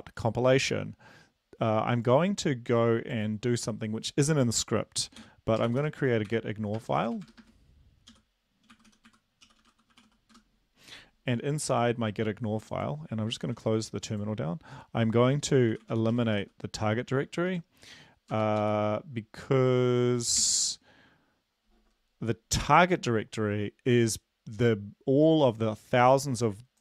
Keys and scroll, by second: 6.1-7.8 typing, 8.8-10.3 typing, 10.7 Return, 13.9 ctrl+`, 16.2-17.0 typing, 17.8 Home, 18.8 Return, 19.3 Up, 20.0 Down, 21.1 ctrl+s.